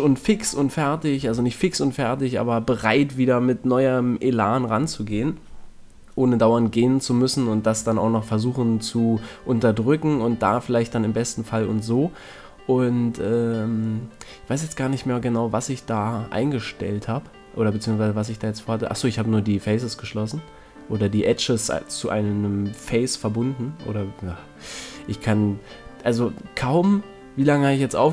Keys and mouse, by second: 3.4-5.2 drag, 7.2 right click, 8.0 f, 10.3 ctrl+Tab, 11.9 right click, 12.7 f, 17.3 f, 20.9 f, 21.3 middle click, 21.5 middle click, 24.3 f, 24.6 a, 25.1 middle click, 25.8 middle click, 27.1 click.